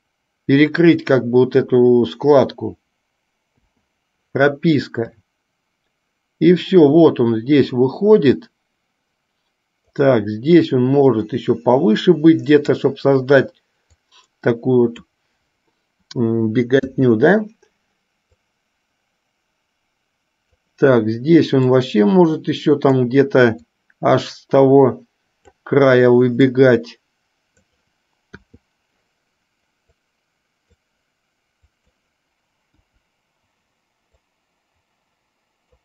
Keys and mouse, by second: 5.3-10.3 drag, 11.3-13.0 drag, 14.4-15.5 drag, 18.6-20.8 drag, 22.1-23.3 drag, 24.0-25.9 drag, 26.6 click, 27.0-28.1 drag, 30.3 click, 33.0 Delete, 34.4 click.